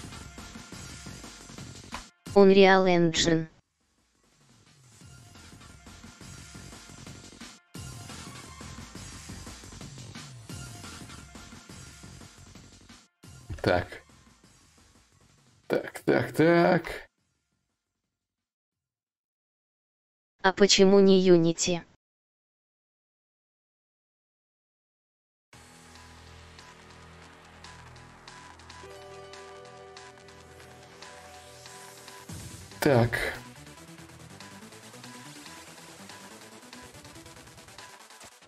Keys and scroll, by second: 5.5 alt+Tab, 28.7 ctrl+=, 30.5 =, 30.8 =, 31.4 -, 31.7 -, 35.7-38.1 typing.